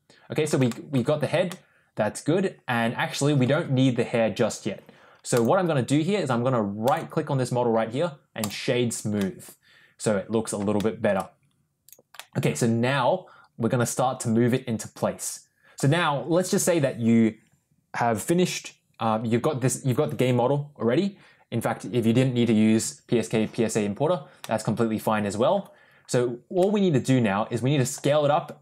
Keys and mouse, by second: 0.6 shift+middle click, 1.4-3.3 middle drag, 5.2 click, 6.7 right click, 9.1-10.4 middle drag, 10.7-11.0 shift+middle drag, 11.7 click, 12.1-15.6 middle drag, 24.3-25.4 middle drag, 26.5-27.8 middle drag.